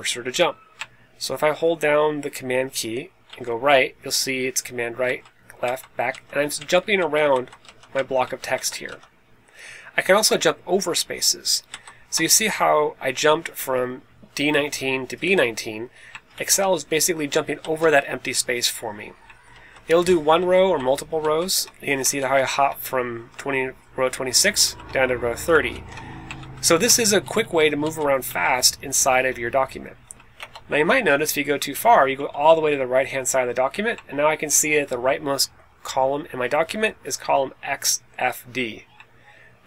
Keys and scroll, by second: 3.2 super+Right, 5.0 super+Down, 5.6 super+Left, 6.0 super+Up, 6.5 super+Right, 6.9 super+Down, 7.2 super+Left, 7.6 super+Up, 7.9 super+Right, 8.1 super+Down, 8.4 super+Left, 8.8 super+Up, 11.6 super+Left, 16.2 super+Right, 17.5 super+Left, 19.4 super+Left, 20.0 super+Down, 20.3 super+Down, 20.7 super+Down, 22.1 super+Up, 24.5 super+Down, 25.6 super+Up, 26.3 super+Down, 27.1 super+Up, 27.3 super+Up, 27.5 super+Up, 28.2 super+Right, 29.9 Down, 30.3 BackSpace, 30.8 Up, 31.6 Right, 32.1 Right.